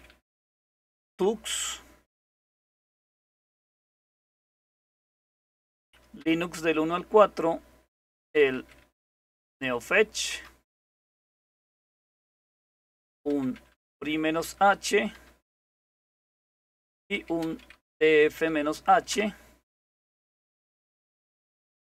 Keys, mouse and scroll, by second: 0.0-1.2 typing, 1.3 Return, 2.4-5.4 typing, 6.2 Return, 7.7-10.9 typing, 12.8-14.9 typing, 15.1 Return, 16.6-18.3 typing, 19.1 Return.